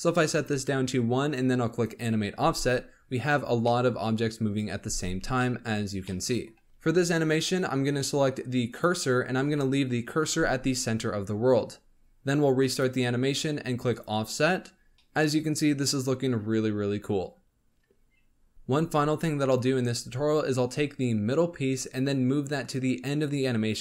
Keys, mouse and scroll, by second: 1.7-2.3 drag, 2.3 space, 3.6-4.8 middle drag, 4.8 space, 5.3-6.6 shift+middle drag, 6.6 click, 7.2-11.7 drag, 12.6-14.9 drag, 14.9-15.5 middle drag, 15.5 scroll up 1.